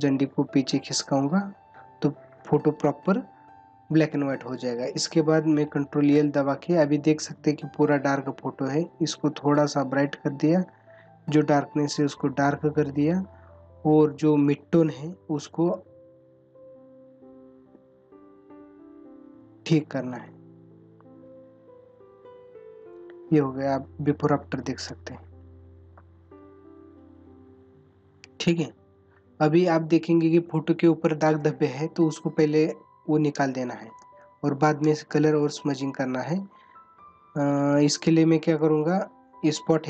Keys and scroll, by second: 34.0 space.